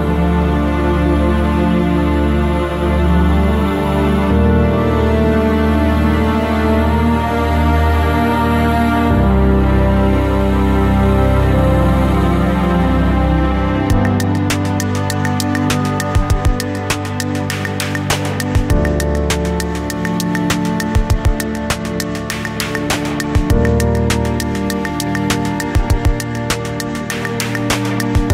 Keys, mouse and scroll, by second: 2.6-3.1 scroll down 1, 3.1-13.2 middle drag, 4.9 KP_7, 6.9 g, 13.2 click, 13.2 g, 14.9 KP_1, 17.3 KP_3, 21.7 KP_7, 22.2 scroll up 1, 23.1-23.7 scroll down 1, 24.3 r.